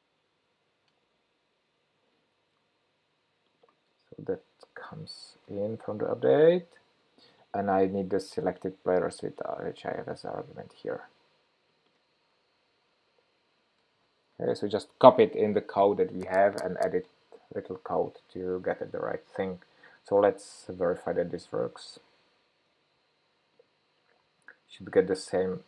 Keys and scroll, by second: 0.1 super+v, 10.3 super+c, 12.8 super+v.